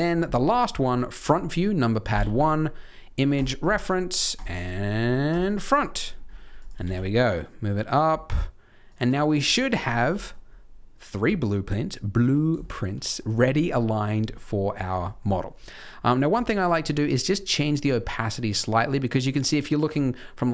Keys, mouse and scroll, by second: 0.4 shift+middle click, 2.1 shift+a, 6.0-6.5 scroll up 5, 6.5 click, 6.7 g, 9.2 middle click, 9.4 scroll down 2, 9.7 middle click, 10.1 g, 11.2 middle click, 12.5 shift+middle click, 12.9 middle click, 13.5 middle click, 15.1 middle click, 16.2 click, 17.2 middle click, 18.3 middle click, 18.8 middle click.